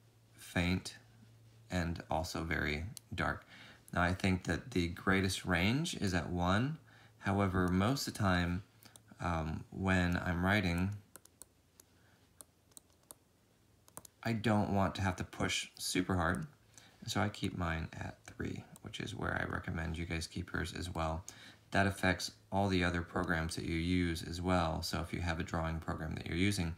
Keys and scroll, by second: 24.4 ctrl+z, 24.7 ctrl+z, 25.0 ctrl+z, 25.2 ctrl+z, 25.7 ctrl+z, 25.9 ctrl+z, 26.1 ctrl+z, 26.3 ctrl+z, 26.5 ctrl+z, 26.6 ctrl+z.